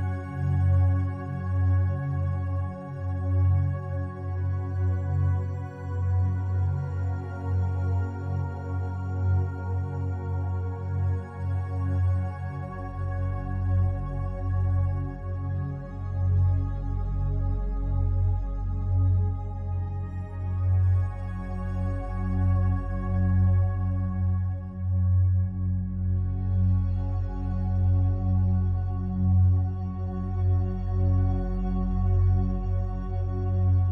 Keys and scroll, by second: 10.1 ctrl+u, 19.7 ctrl+l.